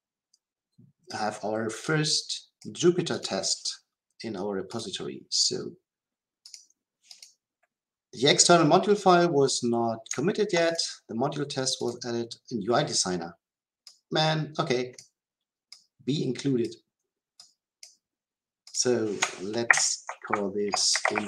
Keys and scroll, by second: 19.6 ctrl+k.